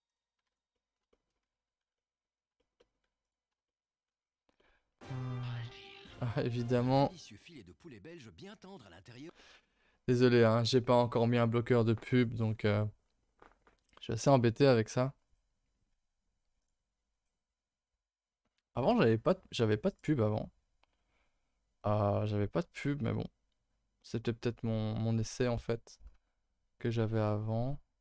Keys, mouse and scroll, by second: 0.1 click, 0.4 scroll up 1, 0.5 Tab, 0.7 middle click, 1.3 scroll up 1, 1.5 a, 1.6 a, 1.8 2, 2.0 middle click, 2.2-2.6 scroll up 2, 2.6 shift+middle click, 3.2 alt+click, 3.7 alt+middle click, 4.2-5.3 scroll down 6, 4.6 middle click, 5.3-8.5 scroll up 2.